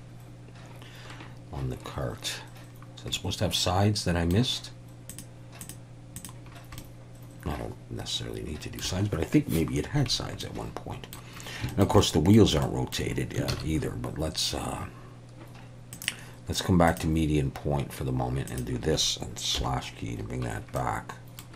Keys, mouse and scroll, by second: 3.1-4.3 middle drag, 5.1 click, 5.6 click, 6.2 click, 6.8-8.8 middle drag, 10.4 middle click, 11.7 shift+middle click, 12.0 middle click, 12.6 middle click, 13.5 ctrl+s, 15.9-17.0 drag, 18.5 click, 19.6 /, 20.8 middle click.